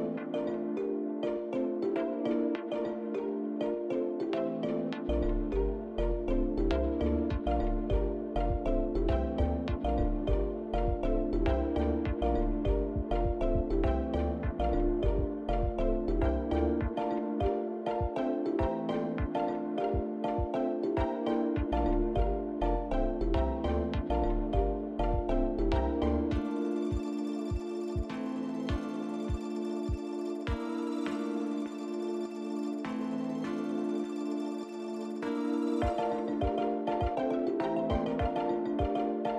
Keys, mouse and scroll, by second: 1.1 click, 2.3 click, 3.6 click, 9.0 click, 10.7 shift+middle click, 12.7 click, 15.2 click, 15.9 shift+click, 16.0 shift+click, 16.5 click, 17.1 click, 17.7 click, 18.3 click, 19.0 click, 19.9 shift+click, 20.4 shift+click, 21.9 shift+click, 22.4 shift+click, 24.8 ctrl+z, 25.9 shift+click, 27.1 shift+click, 27.6 shift+click, 28.3 shift+click, 28.8 shift+click, 29.8 shift+click, 31.3 ctrl+z, 32.9 shift+click, 33.6 shift+click, 35.4 shift+click, 36.8 ctrl+z, 37.5 middle click, 39.0 shift+click.